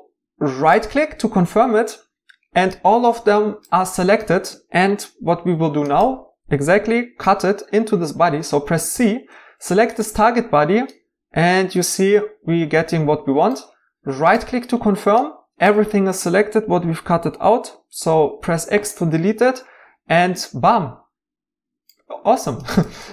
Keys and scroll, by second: 8.9 c, 18.2 x.